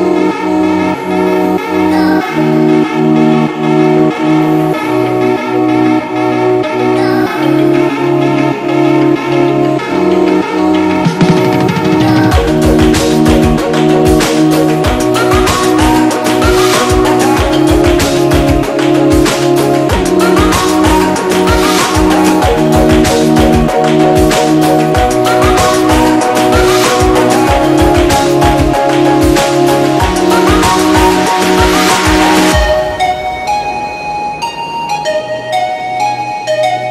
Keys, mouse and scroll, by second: 2.3-4.8 typing, 2.4 click, 3.3 click, 3.7 click, 4.5-5.0 click, 5.1 click, 9.8 space, 10.0 click, 10.4 ctrl+-, 10.6 space, 10.8 click, 11.0 space, 11.4 ctrl+=, 12.7 click, 15.4 click, 18.9-22.6 alt+shift+drag, 24.0 ctrl+z, 25.8 ctrl+c, 27.0-28.4 alt+shift+drag, 29.6 c, 30.3 ctrl+f, 30.6-33.4 alt+shift+drag, 34.5 ctrl+-, 34.8 space, 35.1 click, 35.2 space, 35.6 click.